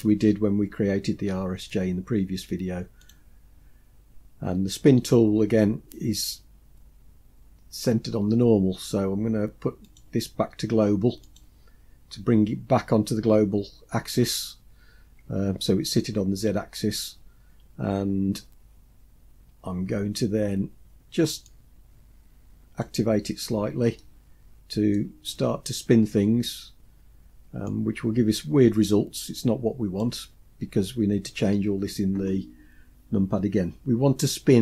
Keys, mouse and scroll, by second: 3.2 click, 10.0-12.0 drag, 21.6-22.9 drag, 23.5-24.1 scroll down 2, 24.1 middle click, 25.3-26.1 scroll down 2, 27.8-30.1 drag.